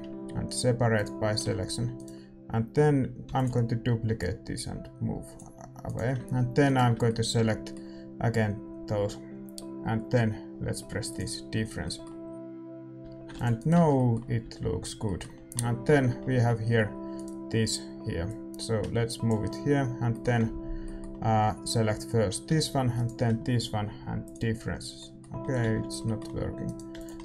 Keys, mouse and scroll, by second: 1.0 p, 1.4 Tab, 1.9-4.1 right drag, 3.2 shift+d, 4.1-6.6 drag, 5.8-11.1 right drag, 7.0-11.1 middle drag, 11.1-13.0 drag, 11.5-15.9 middle drag, 13.0 a, 13.5 ctrl+s, 13.5-15.2 right drag, 13.7 Tab, 14.4 a, 15.9 Tab, 17.1-20.0 drag, 17.1-19.2 right drag, 19.4-22.9 middle drag, 22.9-24.9 right drag, 24.3-26.0 drag, 24.9-27.2 middle drag, 25.6 ctrl+z, 26.3 a, 26.6-27.2 right drag, 27.0 x.